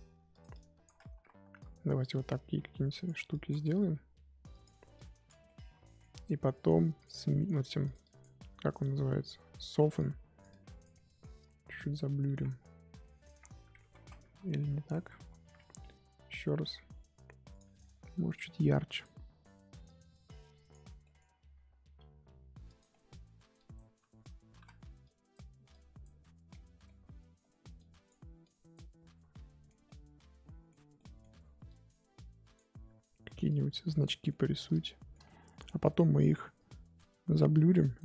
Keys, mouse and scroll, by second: 0.5 click, 1.1 ctrl+z, 1.6-3.8 drag, 3.8 f, 4.9 click, 5.4-7.0 middle drag, 7.0 click, 7.6 f, 8.0-10.9 drag, 10.9 middle click, 11.4 click, 12.1 scroll down 1, 12.2 middle click, 12.4 scroll up 1, 12.5-13.1 scroll down 4, 13.3-13.8 scroll up 2, 13.8 ctrl+z, 14.0 ctrl+z, 14.2 ctrl+z, 14.6 ctrl+z, 14.8 ctrl+z, 15.0 ctrl+z, 15.2 ctrl+z, 17.5-19.0 drag, 19.8-21.0 drag, 21.0 middle click, 21.8 scroll up 1, 22.0 f, 22.9 middle click, 23.5 click, 24.5 ctrl+z, 25.0-26.5 drag, 26.5-27.7 middle drag, 27.7-29.3 drag, 29.3-31.6 middle drag, 31.6-34.3 drag, 34.3-36.5 middle drag, 36.5-38.0 drag.